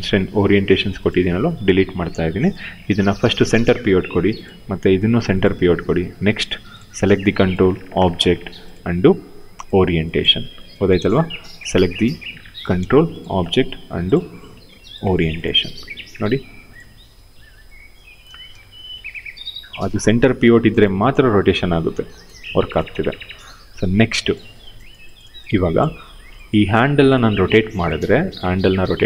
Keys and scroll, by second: 1.1 Delete, 16.5 e, 18.0 ctrl+z, 22.1 ctrl+z.